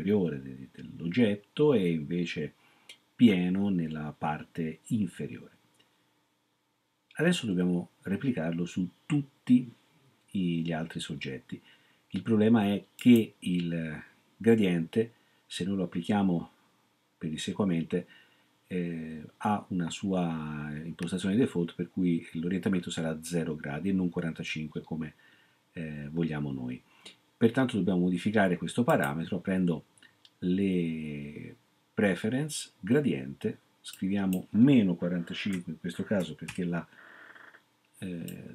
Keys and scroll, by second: 35.6-36.4 typing.